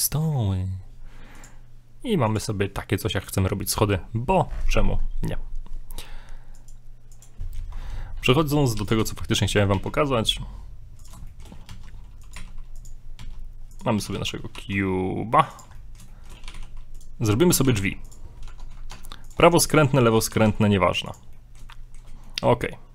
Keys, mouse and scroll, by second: 1.3 click, 2.9 middle click, 4.7-5.0 scroll down 4, 5.0 scroll up 1, 6.5 click, 7.3 middle click, 8.8 x, 9.7 shift+a, 11.3 shift+middle click, 11.7 shift+middle click, 11.8 s, 12.4 g, 13.2 s, 14.0 s, 15.8 middle click, 16.1 shift+middle click, 16.5 shift+middle click, 16.6 g, 17.7 g, 18.5 Tab, 19.6 right click, 20.0 shift+middle click, 20.4 g, 21.4 middle click, 21.7 shift+middle click, 22.1 scroll down 1, 22.3 middle click.